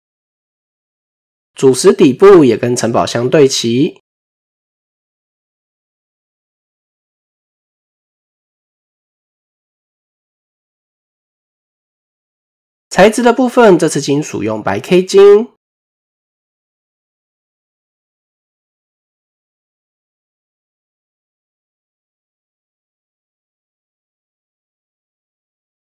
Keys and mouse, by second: 0.4 middle click, 1.0 KP_1, 1.9 shift+middle click, 2.5 click, 3.9 Tab, 4.9 click, 5.9 click, 7.5 g, 9.5 Tab, 10.8 middle click, 11.4 KP_7, 12.1 shift+middle click, 13.8 right click, 17.9 click, 18.5 click, 19.3 drag, 23.4 shift+middle click, 24.1 click.